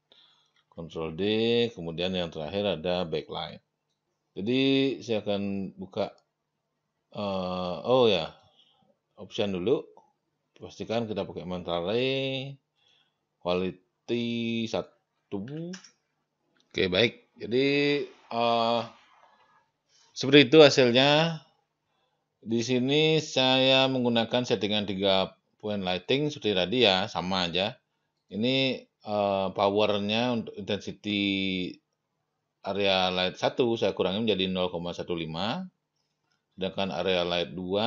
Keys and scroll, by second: 0.5 ctrl+d, 15.7 Return.